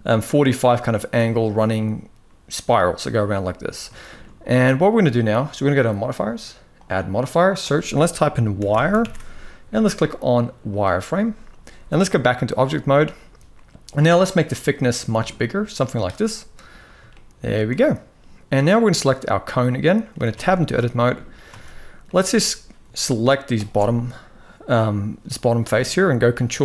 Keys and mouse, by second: 3.7 shift+middle click, 5.5 click, 6.5-10.5 drag, 11.9 click, 13.8-15.8 shift+drag, 16.8 shift+middle click, 19.2-19.8 middle drag, 20.0 Tab, 20.3 shift+middle drag, 20.7 middle drag, 21.2 alt+a, 21.8 middle click, 26.0 ctrl+b.